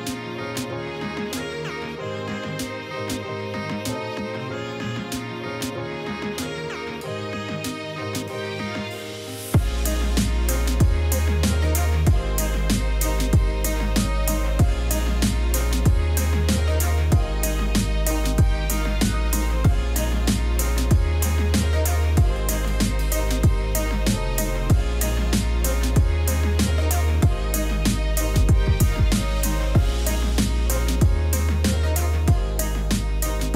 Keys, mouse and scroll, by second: 32.9 Return.